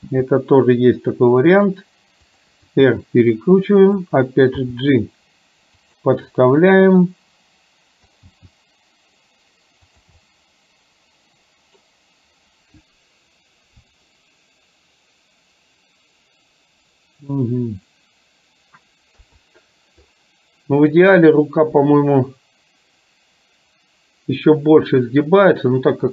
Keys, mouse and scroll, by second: 0.1 g, 2.7 r, 4.6 g, 7.0-7.7 scroll up 1, 7.7 middle click, 8.3 g, 10.4-11.2 scroll up 1, 11.2-11.8 middle drag, 19.3 KP_3.